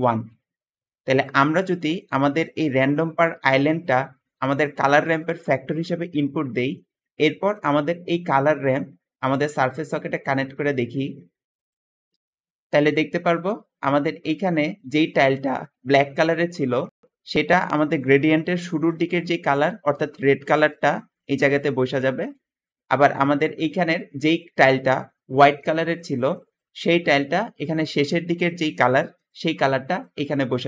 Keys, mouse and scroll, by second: 1.3 Escape, 8.5-10.2 drag, 12.3 Escape.